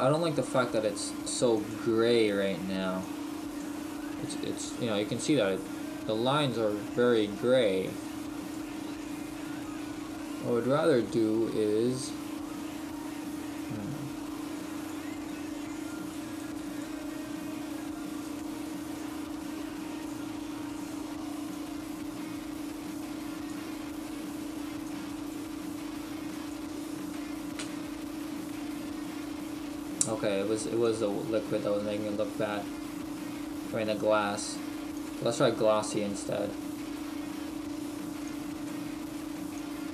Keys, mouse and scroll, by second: 0.1-0.6 scroll up 2, 0.6 Down, 0.9 Down, 2.3 click, 15.9 click, 20.5-21.3 scroll down 1, 22.2 click, 27.1 click, 27.6 Delete, 31.6 click, 36.6-37.6 scroll down 1, 39.1 click.